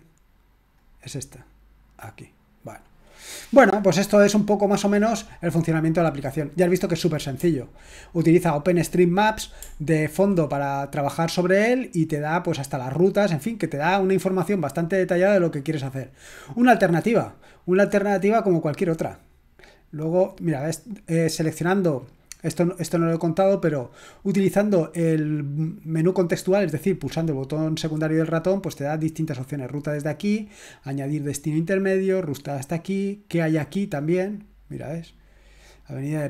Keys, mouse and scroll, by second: 0.8 click, 7.5-8.5 scroll up 4, 9.7-10.5 scroll down 2, 13.8-14.6 drag, 18.2 click, 18.9 middle click, 22.1 click, 22.8-23.4 drag, 28.1 click, 33.4 click.